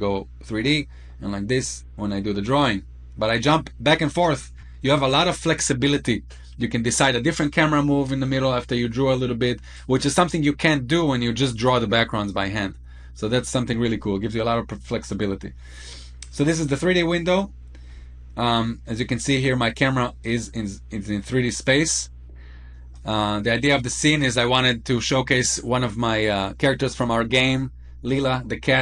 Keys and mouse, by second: 13.9 middle click, 16.7 middle click, 20.1-22.9 drag.